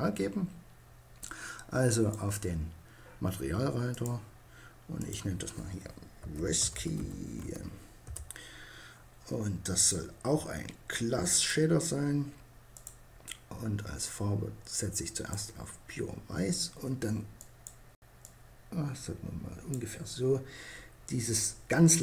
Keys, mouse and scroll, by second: 0.9-2.7 drag, 2.9-5.6 drag, 8.8-10.5 drag, 11.8-13.5 drag.